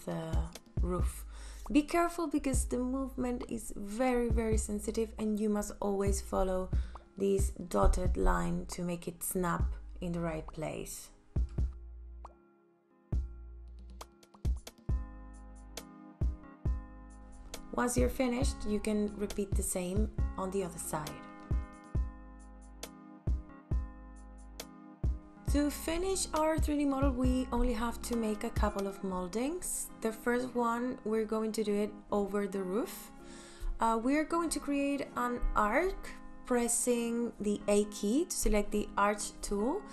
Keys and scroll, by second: 0.1 m, 17.4 space, 20.5 m, 36.7 a.